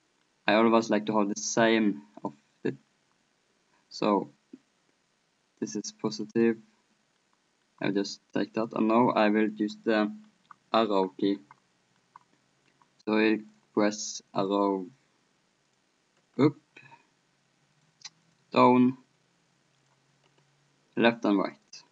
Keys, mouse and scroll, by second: 1.5 middle click, 2.3-3.8 drag, 3.8 right click, 4.1-6.1 middle drag, 6.1-8.2 drag, 7.1-8.2 right drag, 8.2 middle click, 8.7-11.2 drag, 8.7-11.2 right drag, 11.2 middle click, 13.5-14.6 middle drag, 14.6-17.5 drag, 17.8-21.9 drag.